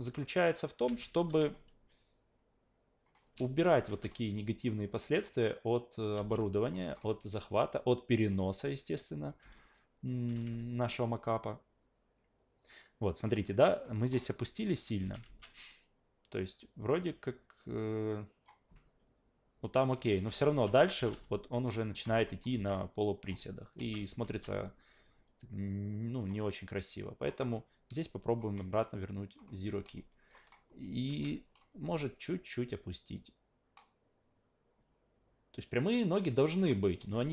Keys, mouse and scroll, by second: 0.9 alt+v, 1.1 w, 1.5-3.0 shift+middle drag, 3.7 click, 3.9 alt+v, 6.1 alt+v, 6.6 click, 7.0 alt+middle click, 7.2 alt+right click, 7.4-8.2 alt+drag, 8.4-9.3 alt+drag, 9.4 alt+v, 9.7-10.1 alt+drag, 10.3 alt+v, 11.0-13.8 drag, 14.1 alt+middle click, 15.2 alt+v, 15.8-18.4 drag, 20.1 alt+v, 20.4 alt+v, 20.9 alt+v, 21.1 alt+v, 21.8 alt+drag, 22.5 alt+v, 22.7-23.3 alt+drag, 23.3 alt+v, 23.8 alt+v, 24.2 alt+v, 25.3-26.3 drag, 26.6-27.2 alt+drag, 27.4 alt+middle drag, 28.3 click, 28.8-29.3 alt+drag, 29.5 alt+middle click, 29.8 alt+right click, 30.0 alt+drag, 30.5 alt+middle drag, 30.8 alt+right click, 31.1 a, 32.8 click, 36.4 alt+right click, 36.5 s, 37.0 s.